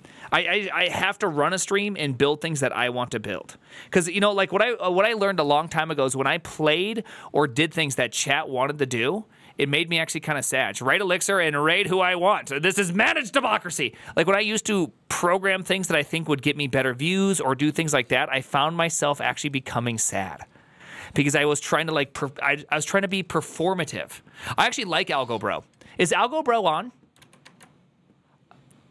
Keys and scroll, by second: 27.3 alt+[.